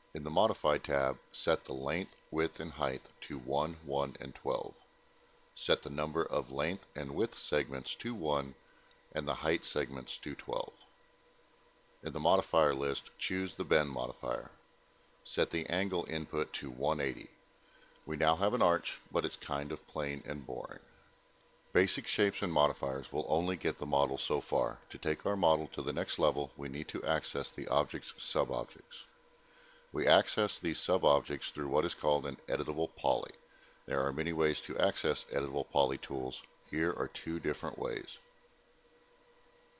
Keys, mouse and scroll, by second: 11.1 click, 13.3 click, 14.6 click, 15.7-17.2 typing, 19.0 middle click, 19.0 scroll up 1, 20.1 alt+middle click, 21.9 middle click, 38.5 click.